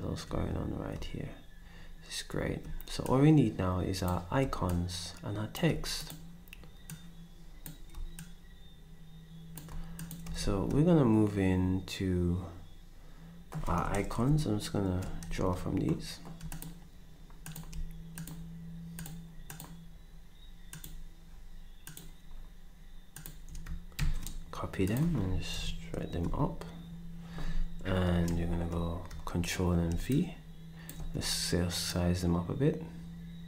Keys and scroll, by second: 10.4 ctrl+s, 14.8 ctrl+alt+Down, 24.0 ctrl+c, 25.2 ctrl+c, 25.6 ctrl+alt+Up, 26.2 Up, 26.2 c, 28.3 ctrl+v.